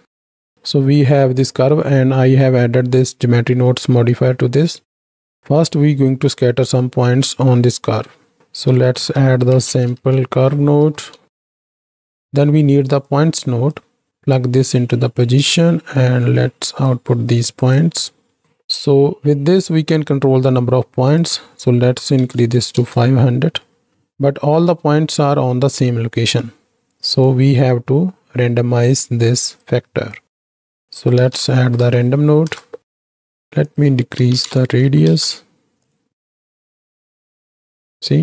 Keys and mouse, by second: 8.4-11.6 drag, 8.4 t, 11.6 shift+a, 13.0 click, 14.1 click, 14.9 click, 16.0-17.0 drag, 17.5-22.8 drag, 22.4 KP_0, 23.7 middle click, 25.3-26.4 shift+middle drag, 27.3-29.6 drag, 30.1-33.1 drag, 33.8-35.1 drag, 35.8-36.9 drag, 37.7 alt+a.